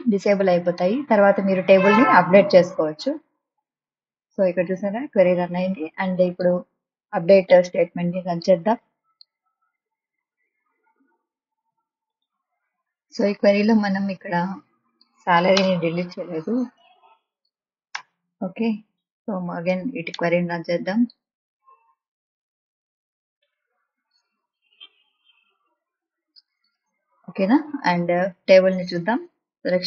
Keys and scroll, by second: 15.6 BackSpace, 18.0 BackSpace.